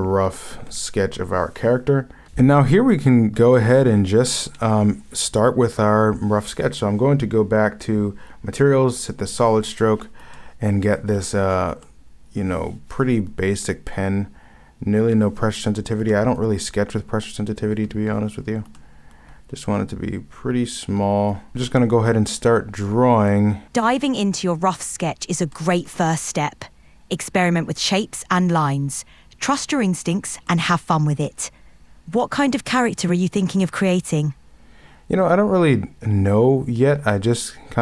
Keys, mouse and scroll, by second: 4.6 ctrl+z, 10.3 ctrl+z, 11.8 ., 11.9 ctrl+z, 16.1 ctrl+z, 18.8 ctrl+z, 21.5 ctrl+z, 23.3 ctrl+z.